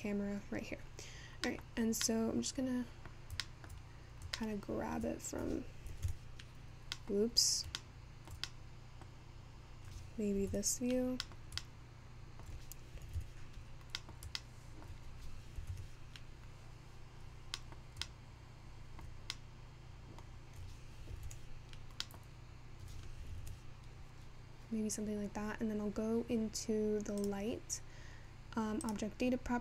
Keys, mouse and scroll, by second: 3.4-5.5 middle drag, 5.5-6.1 scroll down 2, 16.8 alt+KP_0, 29.0 click.